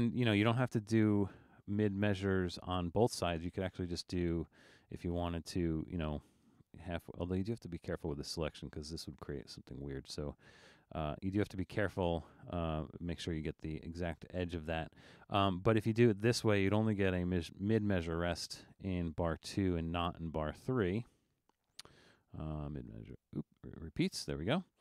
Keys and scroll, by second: 0.2 super+z, 0.9 super+z, 1.4 super+z, 2.0 super+z.